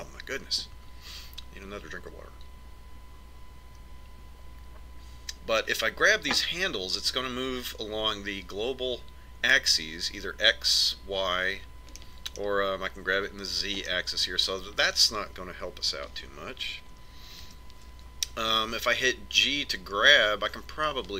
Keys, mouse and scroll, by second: 15.8-17.6 middle drag, 19.4 ctrl+KP_7.